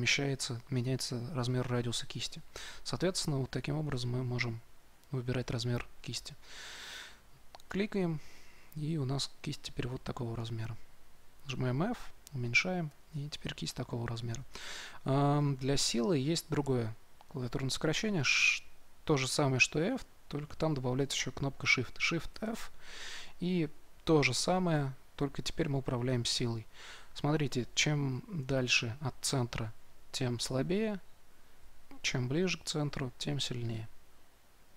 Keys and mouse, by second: 11.4 f, 22.3 shift+f.